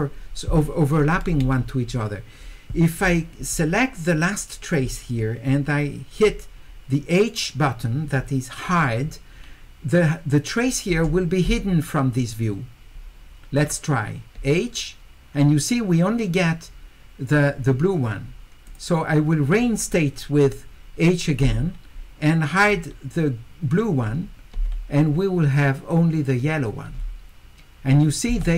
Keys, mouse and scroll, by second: 4.1 click, 13.6 click, 18.7 click, 22.6 click.